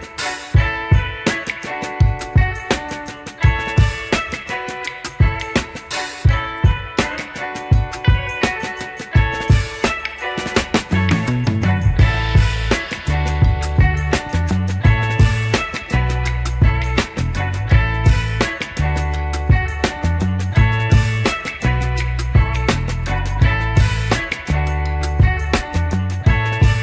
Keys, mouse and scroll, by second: 0.9 click, 1.2 shift+middle drag, 1.8 click, 4.7 drag, 5.4 click, 6.5 drag, 10.0-11.5 right drag, 11.9 click, 13.2-13.6 scroll down 1, 13.8 click, 14.2 click, 14.8 click, 16.7-17.9 scroll up 2, 17.9 click, 18.1 Tab, 18.8 middle click, 19.7 middle click, 21.0 alt+click, 21.9 shift+s, 23.5-24.6 middle drag, 24.8 click, 26.0 scroll up 2.